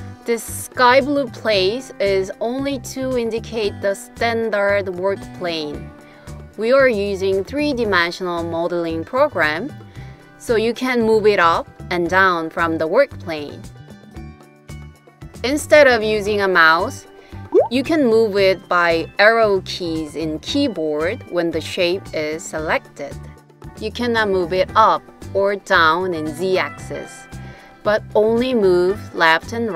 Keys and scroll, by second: 17.0 Right, 17.5 Right, 17.6 Right, 17.7 Right, 17.8 Right, 17.9 Right, 19.0 Down, 19.5 Down, 19.6 Down, 19.7 Down, 19.8 Down, 21.7 Left, 22.3 Left, 22.3 Left, 22.4 Left, 22.5 Left, 22.6-29.7 Left.